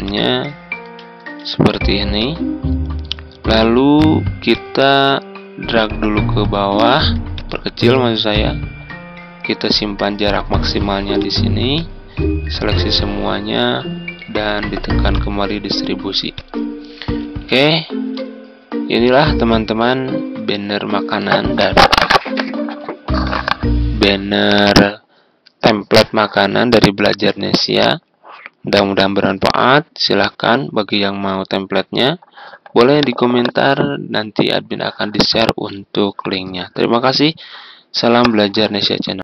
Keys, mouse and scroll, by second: 0.0 click, 1.1 ctrl+g, 1.6-3.9 drag, 4.9-6.9 ctrl+drag, 7.3-12.9 drag, 17.3 F4.